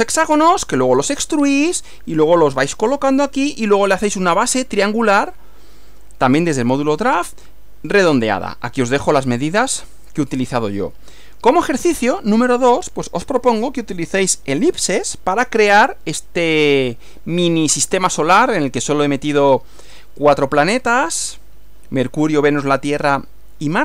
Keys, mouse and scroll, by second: 11.5 Right.